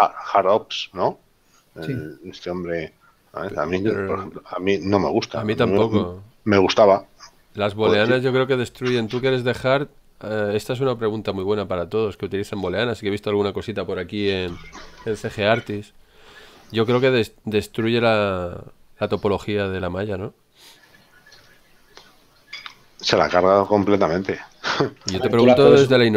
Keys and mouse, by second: 1.5 shift+middle click, 2.9 shift+middle click, 8.6 shift+middle click, 10.2 shift+middle click, 13.9 shift+middle click, 21.2 ctrl+middle click, 25.3 shift+middle click.